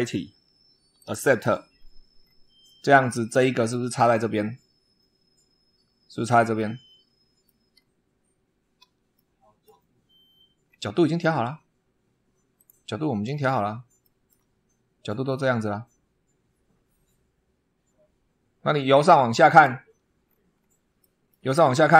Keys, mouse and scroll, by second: 0.8 click, 1.6-2.3 scroll down 2, 2.5-3.7 middle drag, 3.8 scroll up 1, 4.6 scroll up 2, 6.4-7.5 middle drag, 7.6 scroll down 2, 9.0-9.7 shift+middle drag, 10.5 scroll down 2, 12.4 click, 13.1-13.6 scroll down 2, 13.9 shift+middle click, 19.3 click, 20.1-20.6 scroll down 2, 20.8 shift+middle click, 21.6 shift+scroll up 1.